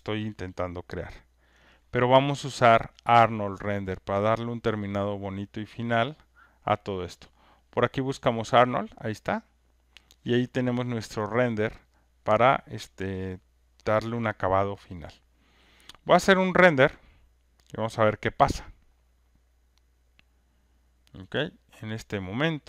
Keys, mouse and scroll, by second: 0.4 alt+right click, 1.4 alt+click, 1.5 alt+click, 8.8-13.5 drag, 16.3-17.4 drag, 21.3 click.